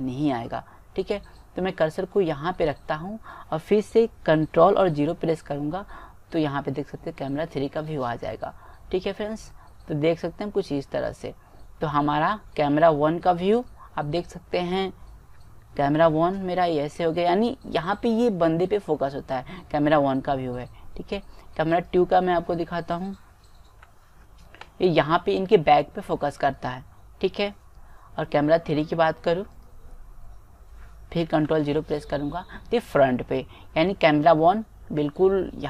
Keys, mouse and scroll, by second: 5.6 ctrl+KP_0, 9.8-11.5 middle drag, 12.2-13.7 middle drag, 13.7-15.4 drag, 16.0 ctrl+KP_0, 17.4 middle click, 18.7-20.8 middle drag, 21.8-23.6 drag, 23.9 ctrl+KP_0, 29.8-31.3 drag, 31.3 middle click, 31.4 ctrl+KP_0.